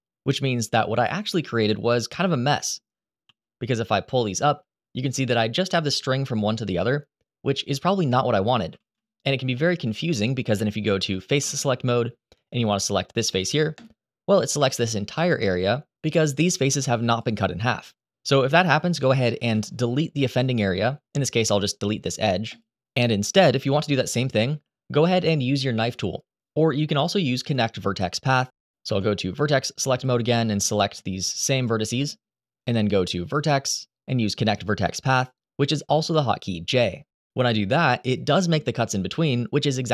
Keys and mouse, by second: 1.8 middle click, 3.0 g, 4.2 middle click, 8.5 ctrl+z, 9.3 middle click, 9.9 shift+middle click, 11.1 3, 13.5 click, 16.8 click, 18.4 2, 19.3 click, 21.0 Delete, 28.7 1, 29.7 click, 31.3 shift+click, 33.2-37.1 drag, 39.1 3, 39.4 click.